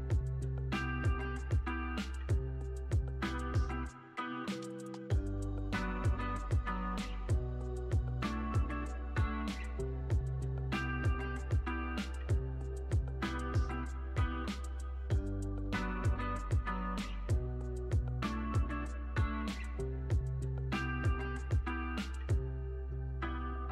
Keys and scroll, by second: 10.4 space.